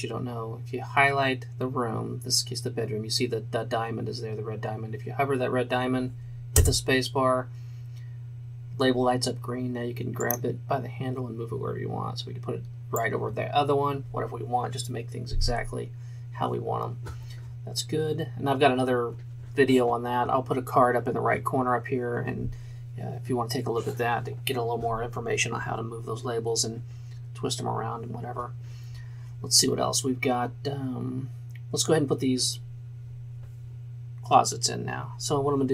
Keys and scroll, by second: 6.7 space.